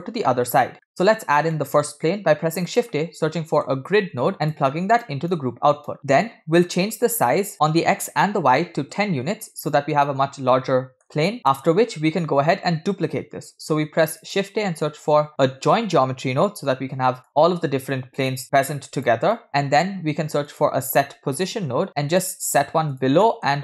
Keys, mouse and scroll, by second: 0.9 middle click, 1.1 scroll up 2, 1.6 middle click, 2.0 shift+a, 5.3 right click, 5.3 space, 5.7 space, 6.0 click, 7.2-8.9 shift+drag, 10.1-11.2 middle drag, 11.4 click, 12.1 scroll down 2, 12.3-13.2 middle drag, 13.6 shift+a, 18.6 click, 19.4 middle click, 19.7 shift+a, 23.3 middle click.